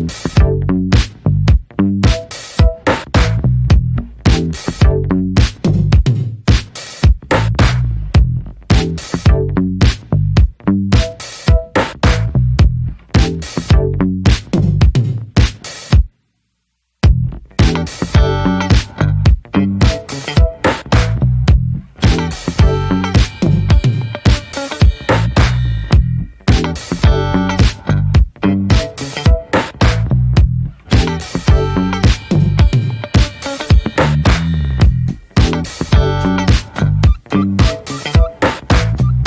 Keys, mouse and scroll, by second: 0.1-0.6 middle drag, 0.9 ctrl+a, 1.0 click, 1.2 scroll down 4, 1.5-2.3 shift+middle drag, 2.6 click, 2.9 scroll up 1, 3.2-5.2 middle drag, 5.2-5.7 scroll down 8, 5.7-6.4 shift+middle drag, 6.4 click, 7.1 ctrl+a, 8.4-9.2 scroll up 3, 8.7 shift+middle drag, 9.2 middle click, 9.5-10.1 scroll up 2, 9.7 shift+middle click, 10.1-13.3 middle drag, 13.3 scroll up 1, 13.5 scroll down 3, 13.7-14.8 shift+middle drag, 14.8 scroll up 1, 15.1-17.9 middle drag, 18.2 scroll down 2, 18.6 shift+middle click, 19.1 ctrl+s, 19.4 drag, 19.7-20.7 shift+middle drag, 20.7 ctrl+s, 20.9-22.4 middle drag, 22.4 ctrl+a, 22.6-26.8 middle drag, 26.9 click, 28.0 click, 28.4 shift+d, 29.7 click, 30.4 ctrl+s, 31.3 click, 31.9-32.8 middle drag, 32.8 click, 33.0 middle drag, 33.3 Tab, 34.4 shift+middle click, 34.6-35.2 scroll up 1, 35.2 Tab, 35.4 click, 35.7 shift+middle click, 35.8-36.3 scroll up 1, 36.3 click, 36.6 Tab, 36.8-37.1 scroll up 1, 37.1-37.5 shift+middle drag, 37.5-38.3 scroll up 2, 38.3 middle click, 38.6-39.0 scroll up 2, 39.0-39.2 shift+middle drag.